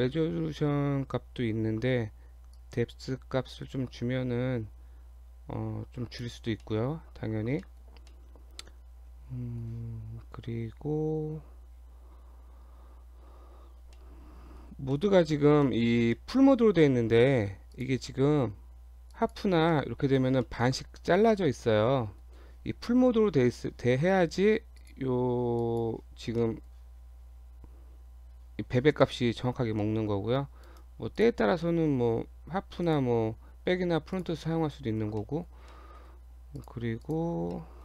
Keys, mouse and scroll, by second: 2.5 click, 6.7 middle click, 7.6 shift+middle click, 8.1 middle click, 10.6-11.8 scroll up 3, 11.8-13.3 scroll up 5, 13.3 scroll up 1, 14.0 middle click, 15.0 middle click, 15.3-15.7 scroll up 2, 15.7 middle click, 16.1 middle click, 17.7 click, 19.8 middle click, 20.2 scroll up 1, 20.4 middle click, 20.8 scroll up 1, 21.1 middle click, 24.8 click, 26.2-26.5 scroll down 2, 26.5 middle click, 27.4-27.9 scroll down 2, 28.0-29.0 scroll down 2, 29.0 middle click, 29.5 scroll down 1, 29.8 middle click, 30.7 right click, 31.2 click, 31.5 scroll down 2, 31.7 middle click, 32.8 click, 34.2 click, 34.4 middle click, 35.2 middle click, 35.5 scroll down 1, 35.7 middle click, 36.3 Tab, 36.6 click, 37.0 click, 37.6 middle click.